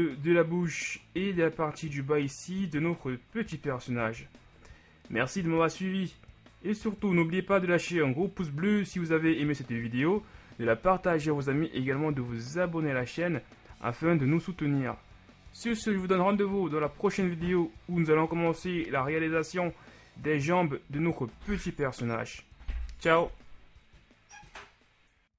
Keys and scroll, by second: 3.3 KP_1.